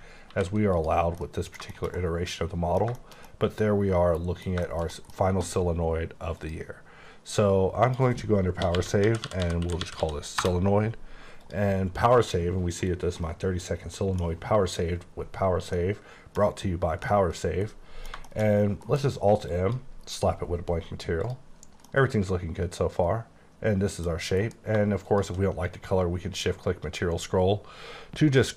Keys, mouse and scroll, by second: 0.3 alt+v, 0.7 click, 1.1 scroll down 1, 1.2 middle click, 3.6 middle click, 6.4 click, 7.8 click, 8.6-10.0 typing, 10.4 Return, 11.4 click, 13.2 middle click, 13.5-14.4 scroll down 1, 15.7 middle click, 17.1 middle click, 18.3 middle click, 18.9 m, 19.5 click, 21.3 click, 21.9 middle click, 24.4 m, 25.0 click, 25.8-26.5 scroll up 2, 26.5-28.0 scroll up 6, 28.0 scroll up 2.